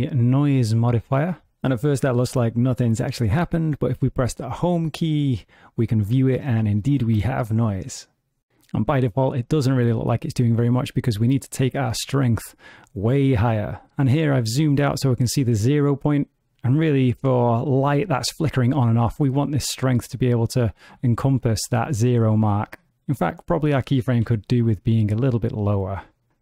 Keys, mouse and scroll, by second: 4.2 Home, 5.0 ctrl+middle click, 6.7 middle click, 6.7 space, 10.9 click, 12.3 click, 19.7 click, 22.9 g, 24.0 g, 26.3 space.